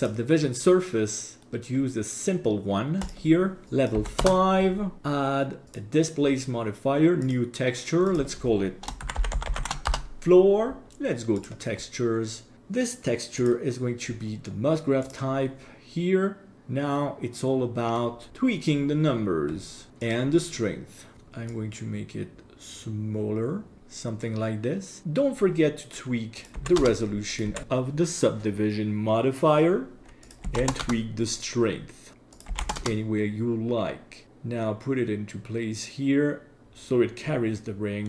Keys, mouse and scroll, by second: 3.1 click, 3.7 click, 5.0-5.8 drag, 7.2 click, 8.1-9.9 drag, 9.5 shift+o, 11.4 click, 13.4-15.2 drag, 16.5-18.0 middle drag, 16.5-16.9 scroll down 3, 19.1-19.9 scroll down 4, 20.0 click, 21.1-21.5 scroll down 3, 21.5-23.8 drag, 25.0 click, 26.4 click, 27.3 click, 30.2 click, 32.3 click, 34.2-36.6 drag, 36.6-38.0 middle drag.